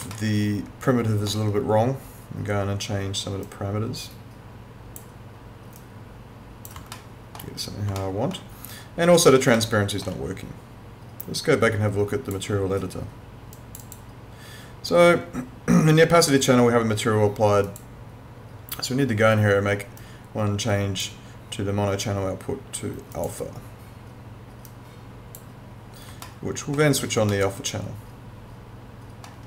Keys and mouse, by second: 0.1 alt+middle click, 3.4 click, 7.0 alt+middle click, 8.0 alt+middle click, 9.6 alt+middle click, 11.2 click, 17.6 click, 23.2 click, 26.3 alt+middle click, 27.3 alt+middle click.